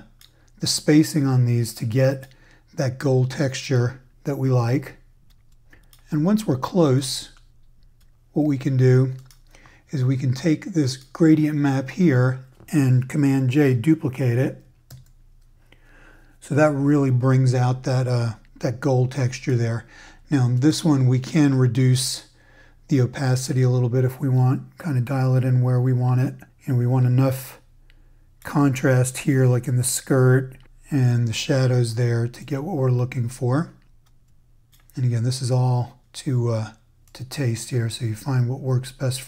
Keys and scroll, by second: 14.9 super+j.